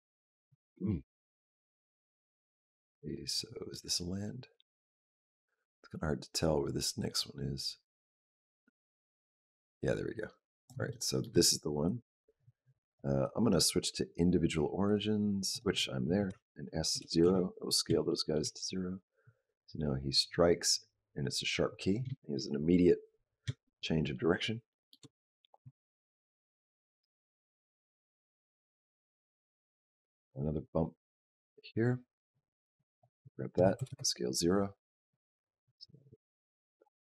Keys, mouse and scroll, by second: 1.5 click, 10.7 shift+middle click, 11.3 click, 11.7 click, 12.7 click, 13.1 click, 14.7 click, 16.1 s, 17.9 shift+middle click, 19.1 click, 23.5 shift+middle click, 23.9 shift+middle click, 24.5 shift+middle click, 25.5 click, 32.6 click, 33.4 s, 35.0 click.